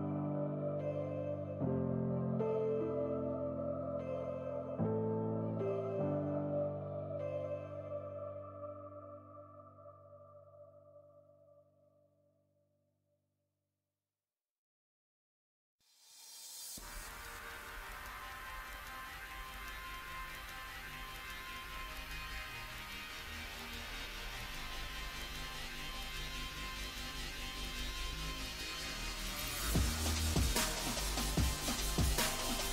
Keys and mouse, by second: 0.4 Tab, 2.4 click, 2.4 right click, 5.8-8.0 drag, 5.8 right click, 8.0 right click, 8.9-12.4 drag, 12.8 middle click, 14.1 z, 16.4 click, 17.2 z, 18.1 z, 18.8 z, 21.2-22.5 drag, 21.2 z, 22.5 right click, 23.4 z, 27.8 KP_1, 28.2 z, 29.6 z, 30.0 z, 31.3 z, 32.1 z.